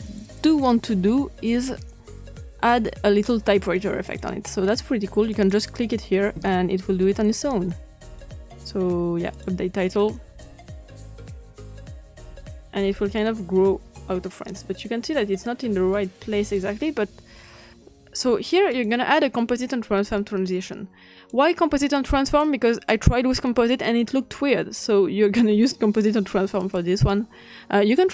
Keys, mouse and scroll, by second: 0.0 click, 1.1 click, 4.0 click, 5.3 click, 7.1-8.1 drag, 9.3 click, 11.4-16.5 drag, 18.7 click, 20.6 click, 21.3-22.7 drag, 22.8-23.9 drag, 24.1-25.4 scroll up 3, 25.4-25.9 scroll up 1, 26.5 click.